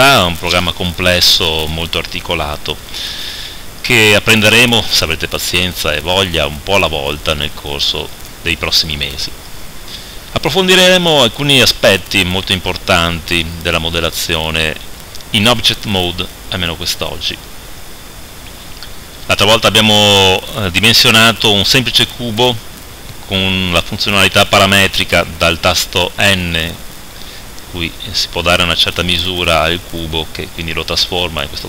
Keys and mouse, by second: 14.7 right click, 25.7 n.